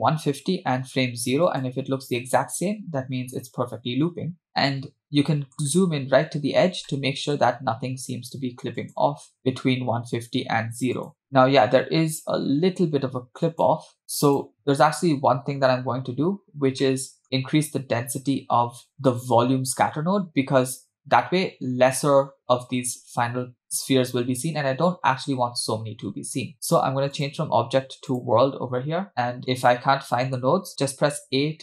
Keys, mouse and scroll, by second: 1.6 click, 4.7-5.1 scroll up 3, 5.2-5.8 shift+middle drag, 5.8-6.9 scroll up 6, 6.9-7.4 shift+middle drag, 8.9 click, 11.1 click, 13.6 click, 14.5 click, 14.6-15.3 scroll down 2, 15.3-16.3 scroll down 4, 16.9-17.2 shift+middle drag, 18.9 scroll down 1, 19.0-19.9 shift+middle drag, 27.2-28.2 drag, 29.0-29.6 scroll down 2, 29.1 KP_Decimal, 29.7 middle click, 31.2 a.